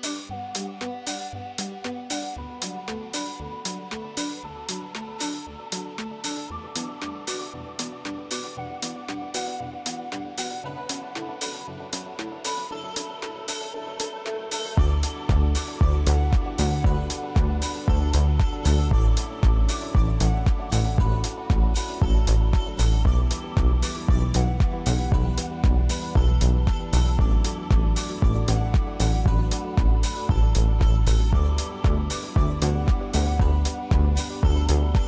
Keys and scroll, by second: 0.0 ctrl+y, 1.7 Delete, 4.2 ctrl+y.